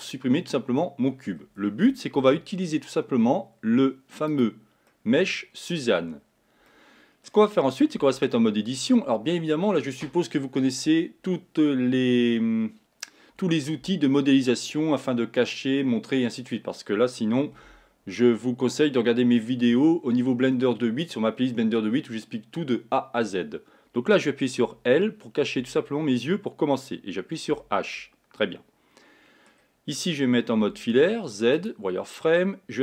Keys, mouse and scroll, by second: 0.9-2.3 middle drag, 2.3 shift+a, 5.0-6.1 middle drag, 6.1-6.5 scroll up 6, 6.8-8.1 middle drag, 8.1 Tab, 17.7 a, 24.9 l, 25.7 l, 27.7 h, 28.1-30.8 middle drag, 30.8 z.